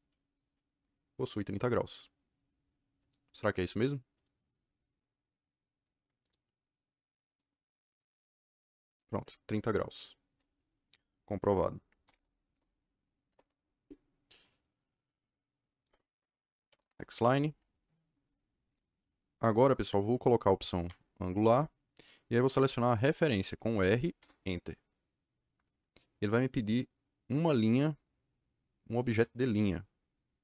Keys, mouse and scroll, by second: 2.9 click, 4.1 click, 6.2 click, 7.2 click, 7.8 click, 8.8 click, 12.0 u, 12.1 KP_Enter, 12.4 KP_Enter, 13.2 KP_Enter, 13.3 KP_Enter, 16.4-17.3 typing, 20.5 a, 20.8 Return, 23.7 r, 24.1 KP_Enter.